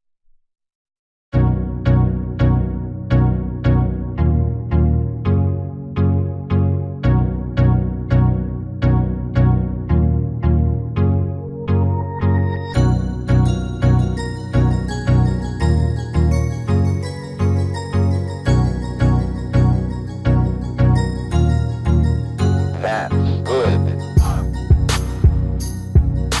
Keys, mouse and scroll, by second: 1.6-3.6 drag, 2.4 middle click, 3.6 middle click, 3.6 KP_1, 5.0 KP_3, 6.0-9.0 middle drag, 8.8 s, 12.8 s, 14.6 s, 19.2-22.2 middle drag, 22.2 shift+d.